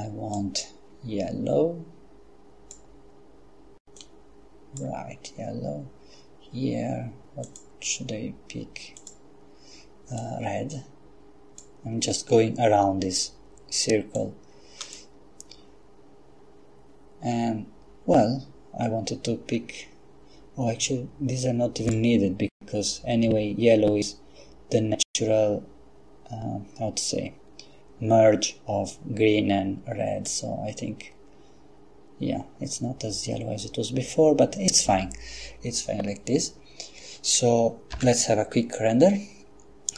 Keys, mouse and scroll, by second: 0.4-3.2 drag, 4.0 click, 7.5 click, 9.0 click, 10.2-12.1 drag, 14.2 click, 21.9 click, 30.3 click, 37.9 F12.